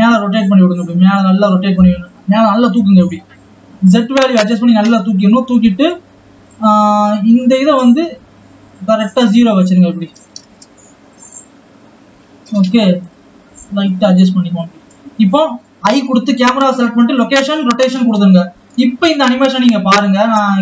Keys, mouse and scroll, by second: 7.7-12.5 drag, 13.2-16.2 drag, 19.4 click.